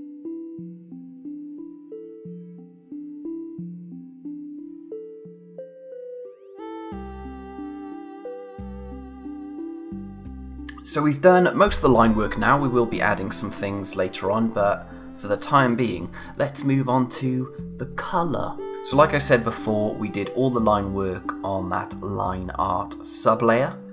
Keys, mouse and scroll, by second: 0.9 scroll up 1, 1.2 click, 1.5 ctrl+z, 1.7 click, 2.1 click, 2.3-2.8 scroll down 2, 2.4 click, 3.9 scroll down 1, 4.0 click, 4.3 a, 4.6 click, 6.0 scroll up 1, 6.0 click, 6.3-7.1 scroll down 3, 6.4 click, 6.9 click, 7.0-8.0 typing, 7.4 click, 7.6 click, 7.8 click, 7.8 scroll up 1, 8.0 click, 8.4 click, 8.9 click.